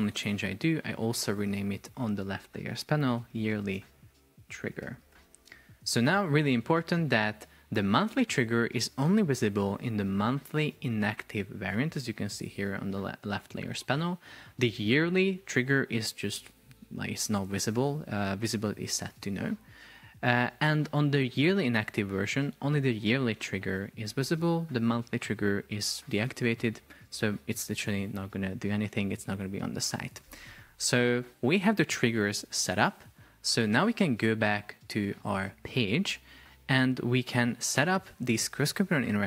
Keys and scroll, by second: 2.9 shift+y, 3.9 space, 5.4 Return.